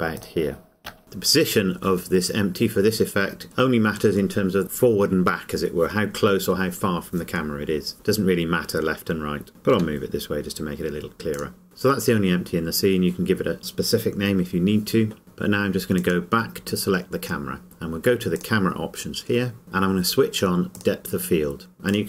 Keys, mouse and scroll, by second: 0.4 click, 9.8 g, 11.5 click, 16.0 click, 18.4 click, 20.7 click.